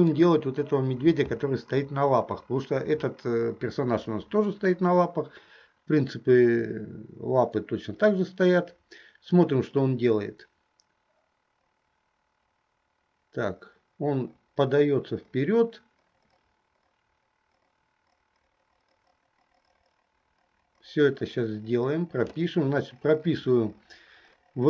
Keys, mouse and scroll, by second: 9.5-22.5 drag.